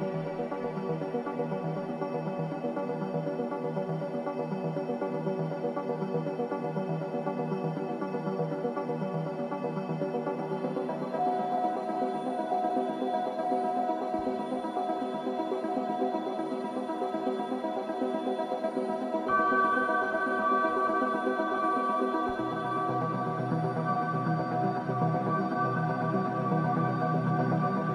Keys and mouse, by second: 2.1 Tab, 3.2-5.2 middle drag, 5.4-7.8 middle drag, 7.8 ctrl+z, 9.9 ctrl+z, 12.0 ctrl+z, 12.0 click, 12.4 Tab, 13.5 z, 15.4-17.4 drag, 20.1 g.